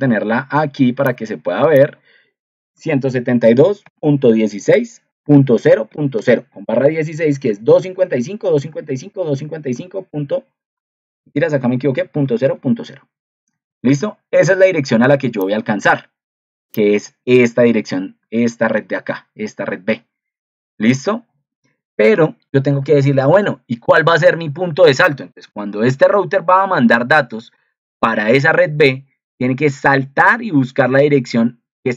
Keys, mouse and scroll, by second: 18.6 ctrl+2, 25.4 ctrl+2.